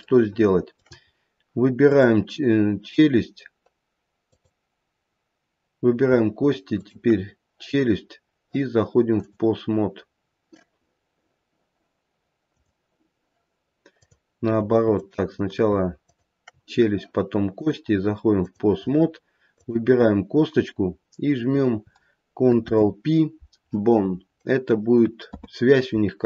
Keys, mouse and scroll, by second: 0.1 shift+middle click, 1.1-1.8 scroll up 1, 1.8 click, 4.4 click, 6.7 shift+click, 9.2 click, 12.6 click, 14.0 click, 14.9 click, 16.0 shift+click, 17.5 click, 19.5 click, 22.5 ctrl+p, 25.2 ctrl+p.